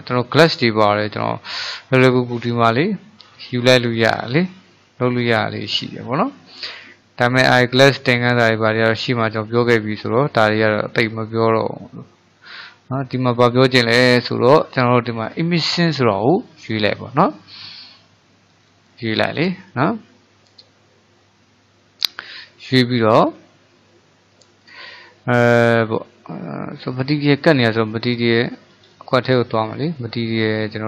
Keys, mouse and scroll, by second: 11.1-14.2 drag, 21.3-24.3 middle drag, 27.3-29.0 middle drag, 29.0 click, 30.1 shift+middle click.